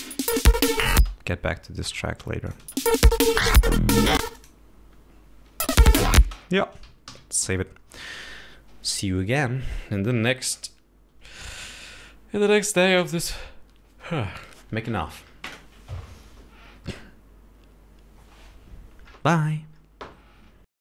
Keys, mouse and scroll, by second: 0.1 space, 1.4 space, 2.0-2.5 scroll up 2, 2.9 click, 3.0 space, 4.6 space, 4.7 click, 6.0 space, 6.6 space, 7.4 ctrl+s.